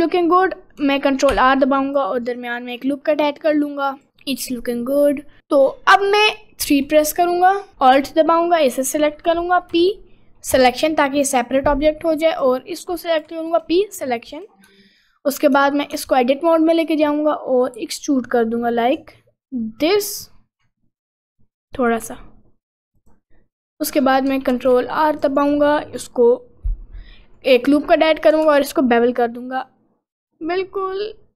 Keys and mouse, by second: 1.3 ctrl+r, 4.1 Tab, 5.2 middle click, 6.6 3, 9.7 p, 12.3 click, 13.2 p, 14.1 Tab, 14.3 click, 14.7 Tab, 15.5 Tab, 16.0 Tab, 16.8 click, 17.3 middle click, 17.8 e, 24.5 ctrl+r, 25.8 middle click, 28.4 ctrl+b.